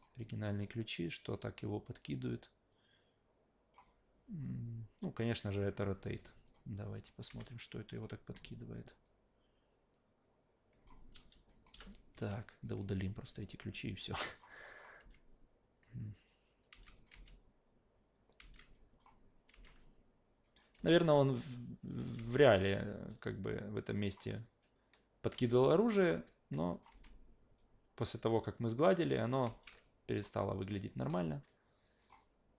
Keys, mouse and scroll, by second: 0.6-3.7 drag, 5.0-5.5 drag, 6.4 ctrl+click, 7.0 click, 7.3 f, 7.9 click, 8.9-10.9 drag, 11.5 click, 11.7 Delete, 14.0-14.4 drag, 14.6 click, 15.0 alt+v, 16.7 alt+v, 16.9 click, 17.1 alt+v, 18.4 alt+v, 18.7 click, 19.5 alt+v, 19.8-20.6 alt+drag, 20.7 alt+v, 21.3 click, 22.0 click, 22.2 alt+v, 22.4 alt+right drag, 22.9-24.1 alt+drag, 25.4 alt+v, 25.9 click, 26.7 click, 26.9 alt+v, 29.8-30.2 drag, 31.1 alt+middle drag, 32.0 click.